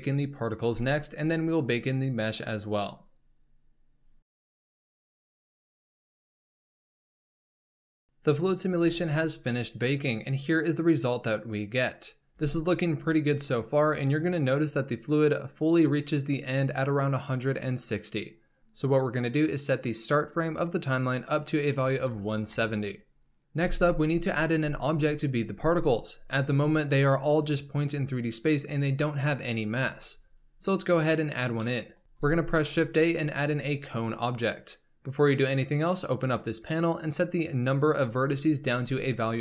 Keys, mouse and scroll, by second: 1.1-2.9 scroll down 6, 3.4 click, 4.2-5.0 scroll up 1, 5.2-5.6 scroll up 1, 5.6-8.1 drag, 8.6 space, 12.5 space, 14.4-18.6 drag, 19.8-23.0 drag, 31.1-31.6 scroll down 2, 31.6-32.0 middle drag, 32.0 x, 32.1 shift+a, 36.1-39.4 drag.